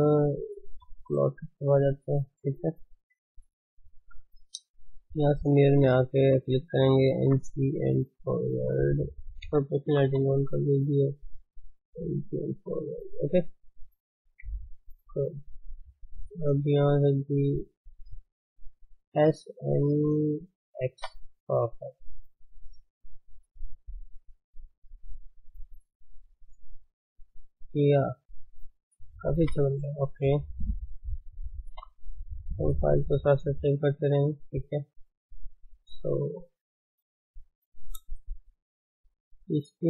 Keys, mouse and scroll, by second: 0.3 click, 0.7 Tab, 1.7-2.9 middle drag, 2.9 KP_3, 4.1 click, 4.3 shift+z, 5.7 click, 6.4 shift+z, 7.2 g, 9.5 o, 9.8 g, 13.0-13.4 scroll up 2, 13.4-14.4 middle drag, 14.4 KP_1, 15.8 click, 18.7 s, 20.9 Tab, 21.2-21.8 scroll down 4, 21.8-22.2 scroll down 2, 22.2 click, 22.5 scroll down 2, 23.3-23.6 drag, 23.6-26.7 middle drag, 29.3 KP_1, 29.7-31.7 scroll up 1, 31.7 ctrl+shift+s, 34.6 drag, 35.1 shift+middle drag, 35.4 scroll up 1, 35.6 click, 37.4-37.8 scroll down 2, 37.8 ctrl+space, 38.1 shift+middle click, 38.4-38.8 scroll up 2, 38.8 scroll down 3, 39.4-39.8 middle drag.